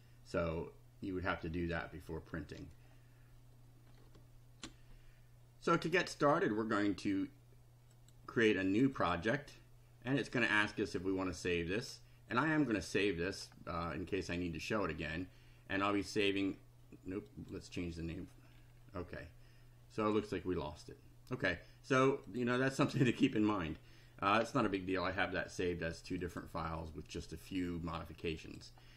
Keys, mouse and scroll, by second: 4.6 ctrl+r, 7.9 click, 8.9 click, 12.3 click, 17.3 click, 18.5 scroll down 2, 18.7 scroll up 1, 18.9 scroll down 1, 22.3 click, 26.3 click, 28.4 click.